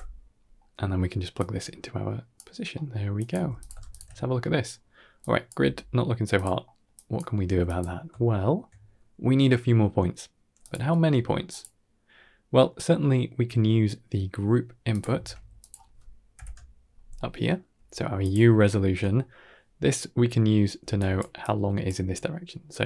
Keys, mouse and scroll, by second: 0.4 middle click, 1.2-2.2 drag, 2.6 middle click, 3.0 drag, 3.5 g, 3.8 alt+shift+click, 4.6-5.1 scroll down 3, 5.1-5.4 drag, 5.5 g, 6.5 middle click, 6.8 drag, 7.3 g, 8.1-8.5 shift+middle drag, 10.5 click, 10.9 g, 12.8 scroll down 1, 13.0 middle click, 13.5 scroll down 3, 13.7-14.3 middle drag, 14.8 click, 15.0 shift+d, 16.2 alt+p, 17.0 middle drag, 17.6 g, 18.4-18.8 ctrl+middle drag, 19.0 middle click, 19.8-20.2 middle drag, 20.7 d, 21.0 click, 21.2 d, 21.2 d, 21.3 click, 21.7 d, 22.6-22.8 drag.